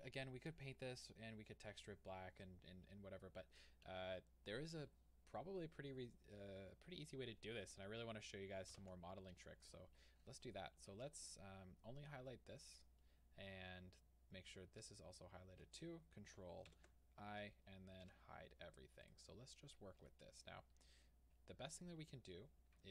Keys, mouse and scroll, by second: 8.8 alt+h, 9.7 click, 11.5 scroll down 1, 16.7 ctrl+i, 18.1 h, 18.4-19.1 scroll up 2, 19.1 click, 20.0 Tab, 20.5 scroll up 1.